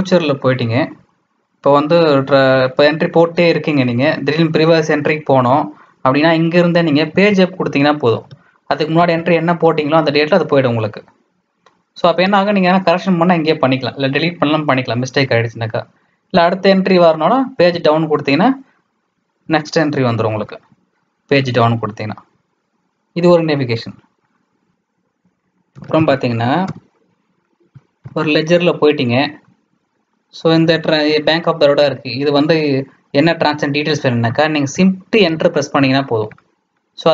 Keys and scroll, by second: 7.1 Page_Up, 8.9 Page_Up, 17.5 Page_Down, 20.4 Page_Down, 25.4-26.6 typing, 28.0 Return, 30.6 Down, 30.8 Down, 31.1 Down, 35.2 shift+Return.